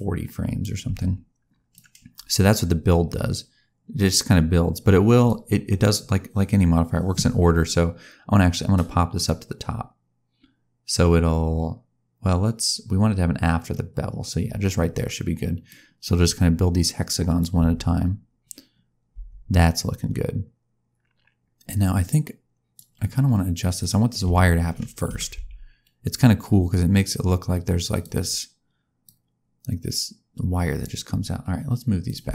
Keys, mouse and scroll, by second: 1.7 click, 9.1 click, 15.7 click, 17.5 space, 19.1 space, 19.7 click, 23.7 click, 24.2 a, 25.0 g, 29.0 click, 32.0 click.